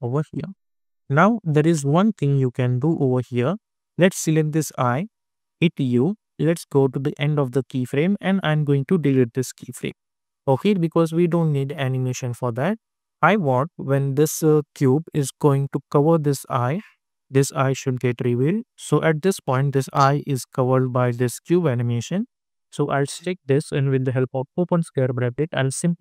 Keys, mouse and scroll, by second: 1.6 space, 4.1 click, 5.6 u, 6.4-11.2 drag, 11.5-14.3 drag, 14.3-15.6 scroll up 1, 16.8-18.4 drag, 22.7 click, 24.6 [.